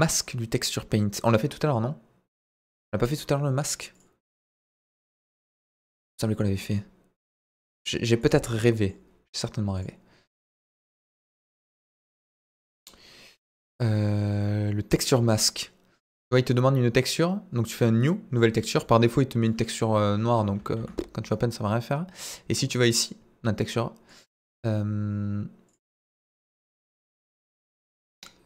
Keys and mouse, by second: 3.6-5.2 drag, 5.5-5.9 middle drag, 7.3-8.3 drag, 8.7 middle click, 10.6-12.3 drag, 14.9 click, 17.7 click, 19.5 click, 20.8 ctrl+z, 24.1 click, 25.7-26.1 drag, 27.6-28.4 drag.